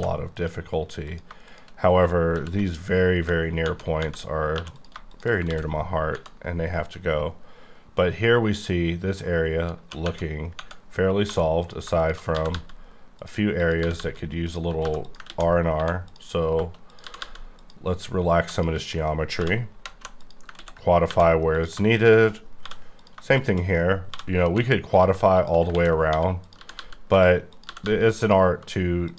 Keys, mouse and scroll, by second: 0.3 click, 1.0 click, 1.4 shift+click, 2.3 r, 3.6 scroll down 2, 4.5 2, 4.7 click, 5.5 ctrl+x, 5.7 scroll down 5, 9.9 q, 10.0 Tab, 10.6 Tab, 11.2 1, 11.6 click, 12.3 g, 12.5 g, 13.2 click, 13.6 click, 13.8 g, 14.0 g, 14.5 click, 14.8 2, 15.0 click, 15.3 ctrl+x, 15.7 1, 16.0 click, 16.9 click, 17.1 g, 17.2 g, 18.4 shift+click, 19.4-20.0 typing, 20.2 click, 20.6 ctrl+x, 21.0 1, 21.5 click, 22.6 j, 23.0 click, 24.1-24.5 typing, 24.9 click, 25.7 ctrl+x, 26.1-27.8 typing, 26.4 click, 27.1 click, 27.5 click, 28.1 click, 29.1 click.